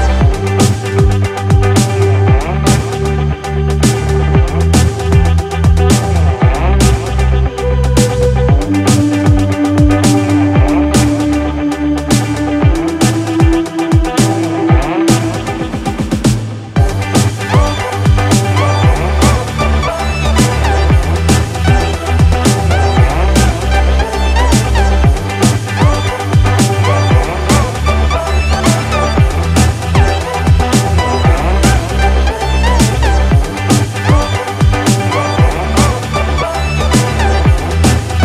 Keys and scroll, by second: 7.4 ctrl+-, 17.8 ctrl+=.